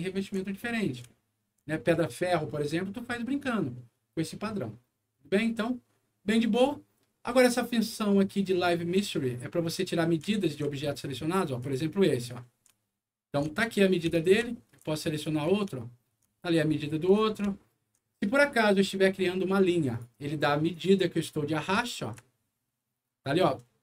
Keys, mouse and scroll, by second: 0.5 alt+middle click, 1.1 alt+middle click, 2.5 alt+middle click, 3.2 alt+scroll up 1, 3.7 alt+middle click, 4.2 alt+scroll down 1, 6.2 middle click, 6.6 scroll down 1, 8.9 click, 10.2 alt+middle click, 10.7 alt+middle click, 11.5 alt+click, 12.3 alt+middle click, 12.7 alt+middle click, 14.1 alt+middle click, 14.4 alt+middle click, 15.1 ctrl+click, 15.7 alt+middle click, 16.3 alt+middle click, 17.0 alt+click, 17.4 alt+middle click, 18.8 alt+click, 19.8 alt+click, 20.6 alt+click, 21.3 middle click, 21.7 click.